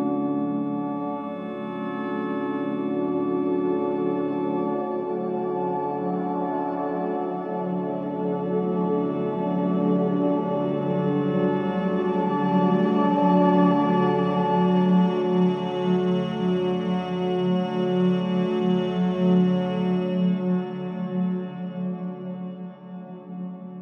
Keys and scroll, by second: 0.4 4, 11.1 3, 12.5 shift+i, 16.6 Delete, 18.4 Delete.